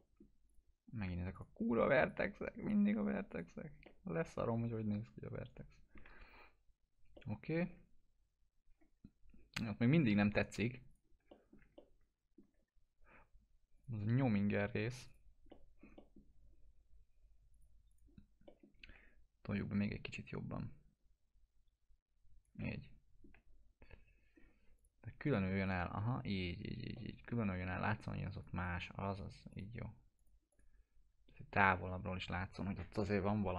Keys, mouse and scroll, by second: 0.5 click, 3.9-6.1 alt+middle drag, 7.2-7.8 alt+middle drag, 9.1 scroll up 1, 10.9 click, 11.2 F4, 11.3 middle click, 11.8-12.4 alt+middle click, 12.9 scroll up 1, 13.8 click, 14.6 scroll down 1, 15.1 click, 15.5-16.3 alt+middle click, 17.6 click, 18.5 alt+middle click, 18.9 w, 19.6-23.2 drag, 22.6-24.4 alt+middle drag, 24.4 scroll up 1, 24.8 click, 26.0 F4, 26.4 scroll down 1, 27.0-27.7 alt+middle click, 28.5 click.